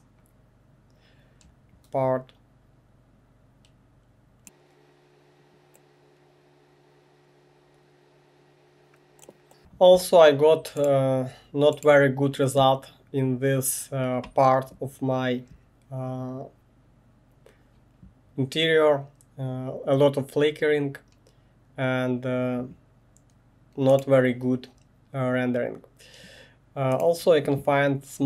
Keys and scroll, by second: 5.7 space, 5.7 1.